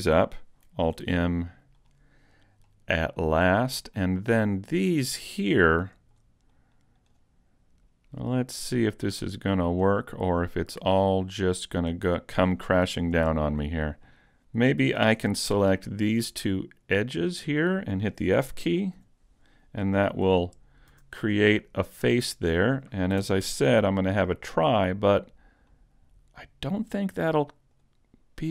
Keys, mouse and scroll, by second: 0.9 alt+m, 2.7 middle click, 4.7 right click, 5.5-5.8 scroll down 1, 5.8 shift+middle click, 6.5 click, 7.8 right click, 8.5 click, 10.2-10.5 scroll up 1, 10.5 middle click, 11.1 scroll up 1, 11.2 scroll down 1, 11.7 scroll down 1, 12.1 shift+middle click, 13.0 middle click, 15.1 ctrl+Tab, 15.9 right click, 17.0 shift+right click, 19.0 f, 20.9 a, 21.4 middle click, 23.3 ctrl+Tab, 24.8 right click, 25.7 click, 27.0-27.7 scroll down 1, 27.7 right click, 28.1 scroll up 1.